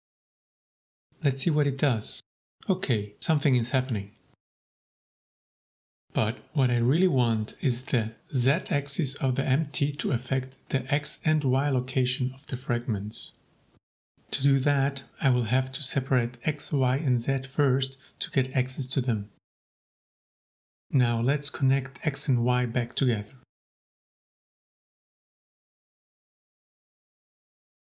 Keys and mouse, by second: 0.1-1.1 drag, 2.1 g, 3.9 Escape, 9.1 click, 9.7 click, 10.2 click, 11.2 middle click, 12.2 shift+a, 16.6 click, 17.1 shift+a, 22.5 middle click, 23.2-24.1 drag, 24.3 middle click, 25.7-26.5 drag, 26.7 shift+a.